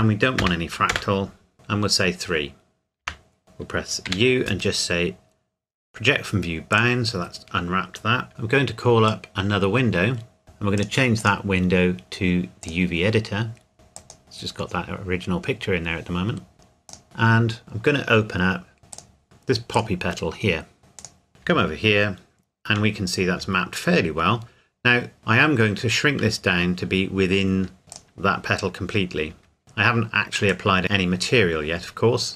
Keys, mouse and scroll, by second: 0.4 KP_0, 0.9 KP_Enter, 3.0 Tab, 4.0 u, 6.7 click, 8.3 Tab, 9.1 click, 14.0 click, 14.2-15.2 scroll up 1, 15.2-15.5 scroll down 1, 16.9 click, 18.9 click, 19.2-19.7 scroll down 1, 19.7 click, 21.3 scroll down 1, 21.4 Tab, 23.2 a, 25.2 Tab, 27.8 s, 27.9 click, 29.3 Tab, 29.6 shift+middle click, 30.5 click, 30.8-31.4 scroll up 1.